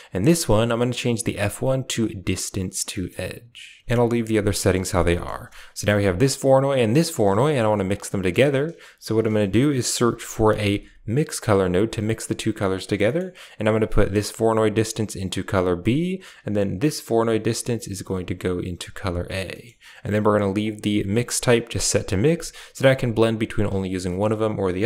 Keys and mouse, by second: 0.4-1.9 drag, 2.8 middle click, 4.4 middle click, 4.9 middle click, 6.0 ctrl+shift+click, 6.8 ctrl+shift+click, 7.2 middle click, 7.2-8.9 typing, 7.8 click, 12.9 middle click, 13.7 click, 14.6 click, 16.6 click, 18.0-19.1 drag, 19.4 middle click, 20.5-21.7 drag, 22.4-24.8 drag.